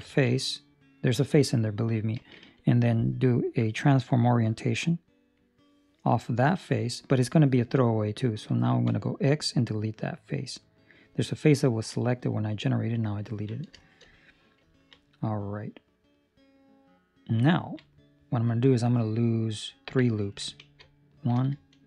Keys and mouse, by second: 0.1 ctrl+middle click, 0.3 middle click, 3.4 click, 11.6 ctrl+middle click, 11.9 middle click, 13.3 ctrl+middle click, 13.7 shift+middle click, 14.1 middle click, 14.7 ctrl+middle click, 15.0 middle click, 15.9 middle click, 17.5 ctrl+middle click, 17.8 middle click, 18.7 middle click, 20.3 ctrl+middle click, 20.3 ctrl+middle click, 20.9 alt+right click, 21.7 alt+shift+right click.